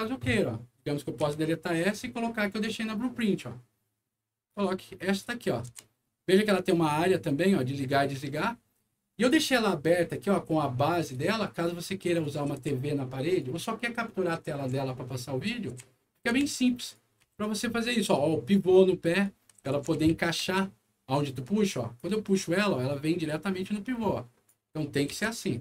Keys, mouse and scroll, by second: 1.2 Delete, 2.6-4.4 drag, 5.6 e, 6.8-9.2 drag, 9.9 scroll down 1, 10.5 scroll down 1, 12.1-12.9 typing, 12.2-13.3 right drag, 14.2-16.9 right drag, 14.4 d, 15.8 w, 16.3 e, 17.2 w, 18.1 click, 19.2-21.1 right drag, 19.3-20.6 typing, 21.9-24.4 drag, 25.0 Delete.